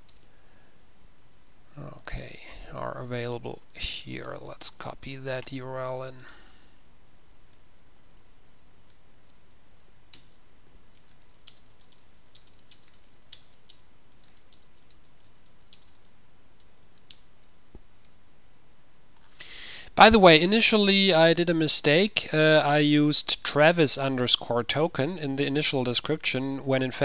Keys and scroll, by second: 0.8 Return, 4.4 ctrl+a, 4.6 ctrl+x, 4.7 ctrl+w, 11.5 ctrl+v, 11.9-17.3 typing.